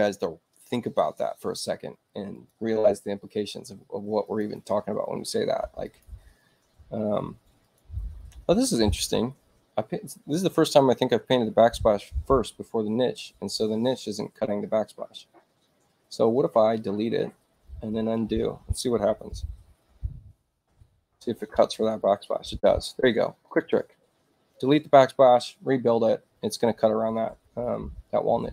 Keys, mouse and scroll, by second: 1.7 space, 2.4 click, 4.3-5.4 drag, 5.9 click, 7.1 space, 7.6 click.